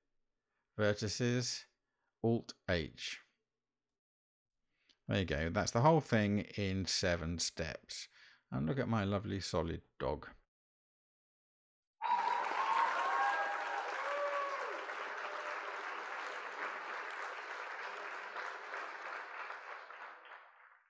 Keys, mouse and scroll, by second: 3.3 alt+h, 5.8 Tab, 8.4 click, 8.8-9.9 middle drag.